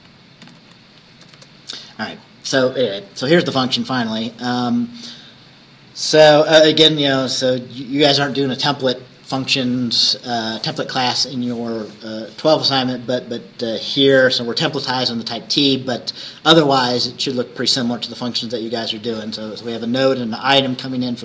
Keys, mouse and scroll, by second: 0.5 Right, 2.3-2.9 scroll up 4, 3.2-4.1 scroll up 4, 4.9 scroll down 2, 13.2 scroll down 2.